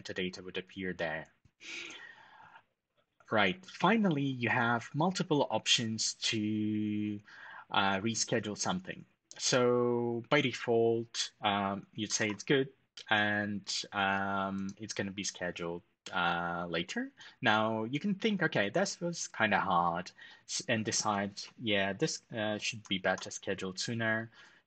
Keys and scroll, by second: 11.9 ctrl+alt+shift+super+#, 22.7 ctrl+alt+shift+super+@.